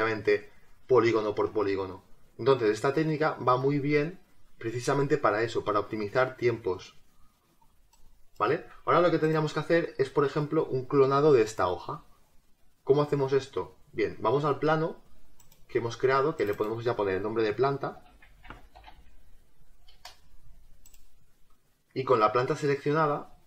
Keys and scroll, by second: 17.9 p, 18.9 a, 19.9 BackSpace.